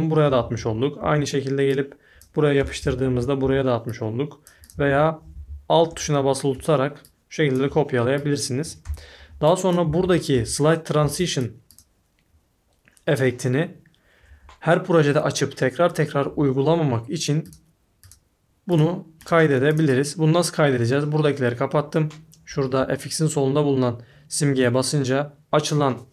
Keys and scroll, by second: 0.0-1.0 typing, 2.3-3.4 typing, 4.4-6.8 typing, 8.8-11.0 typing.